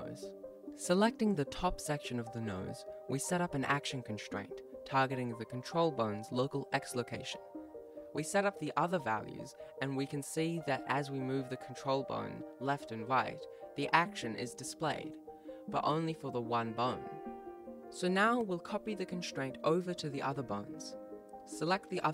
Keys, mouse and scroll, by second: 1.5 click, 4.5 click, 8.4 click, 9.0 click, 9.4 click, 10.3 right click, 10.4 g, 11.0 g, 11.4 ctrl+s, 12.3 right click, 12.3 click, 12.8 ctrl+s, 12.9 click, 13.6 ctrl+s, 13.6 click, 13.9 click, 14.5 right click, 15.0 g, 21.9 right click.